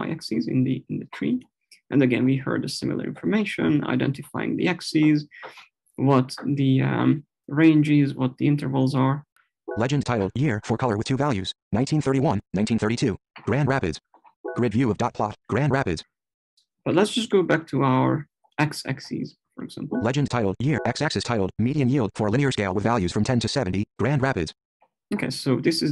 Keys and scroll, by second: 19.6 Left.